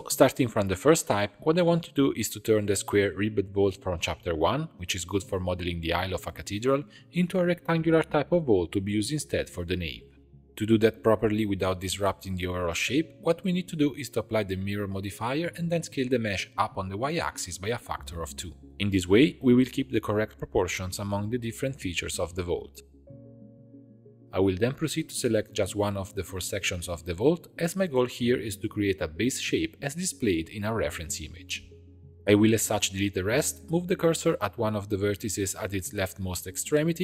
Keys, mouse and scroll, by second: 0.0-10.5 middle drag, 10.5 click, 10.7 Tab, 11.8 g, 13.5 Tab, 14.5 ctrl+a, 15.7 Tab, 17.0 s, 18.6 Tab, 18.7 click, 19.5 click, 20.7-22.4 middle drag, 22.4 click, 24.0 click, 25.1 click, 25.6 click, 26.3 middle click, 26.8 3, 27.9 alt+click, 28.6 alt+shift+click, 29.3 alt+shift+click, 29.8 alt+shift+click, 30.3 alt+shift+click, 30.8 alt+shift+click, 31.9 ctrl+i, 32.4 x, 33.7 1, 33.9 click, 34.9 shift+s, 36.2 Tab.